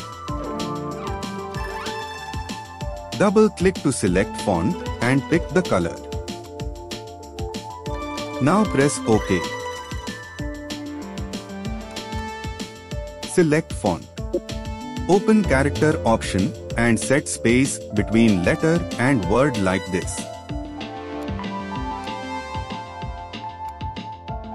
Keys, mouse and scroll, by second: 14.1 ctrl+t.